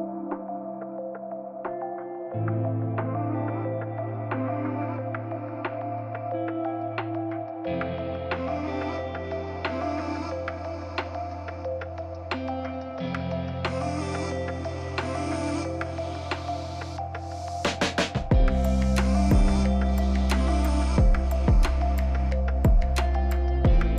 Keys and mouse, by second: 0.8 x, 2.1 Tab, 4.9-6.1 drag, 7.0 a, 7.3 KP_Divide, 9.1 g, 9.1 z, 11.0 click, 12.0 KP_0, 13.0 drag, 15.2 t, 15.8 z, 20.0 KP_Divide.